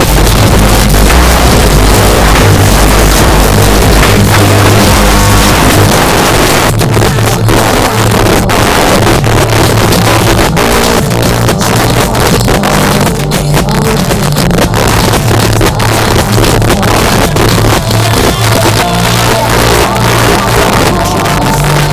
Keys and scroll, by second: 5.9 Page_Down.